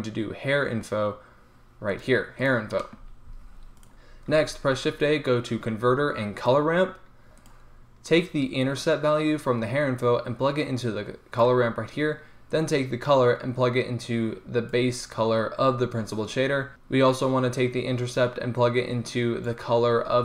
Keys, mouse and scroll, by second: 3.4 g, 4.4 shift+a, 8.7-11.3 drag, 12.6-14.5 drag, 14.5 middle click, 17.8-20.2 drag.